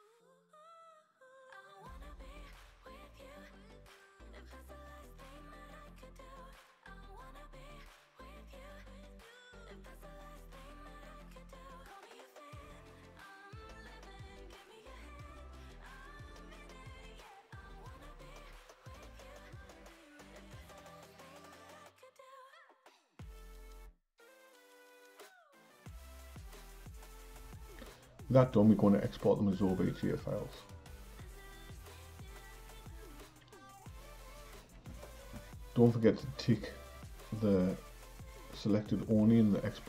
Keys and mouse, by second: 0.5 click, 0.7-3.0 drag, 3.0-3.8 typing, 7.0 Left, 8.4 Tab, 9.0 a, 9.6 q, 11.2 Tab, 11.6 click, 12.7 click, 12.9-13.9 drag, 13.9 BackSpace, 14.1 BackSpace, 14.4 BackSpace, 14.5 BackSpace, 16.9 click, 18.2 Tab, 19.2 a, 19.5 q, 21.0 Tab, 21.9 click, 22.1-23.3 drag, 23.3 BackSpace, 23.4 BackSpace, 23.7 BackSpace, 23.8 BackSpace, 25.4 o, 27.2 click, 30.3-33.6 drag.